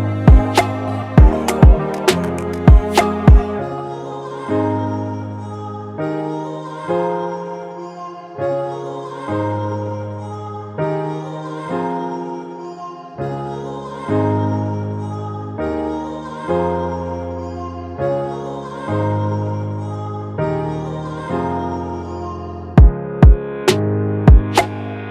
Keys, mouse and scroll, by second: 8.0-8.6 typing, 20.6 right click, 21.7-22.2 alt+scroll up 1, 22.7 double click, 25.0-25.1 typing.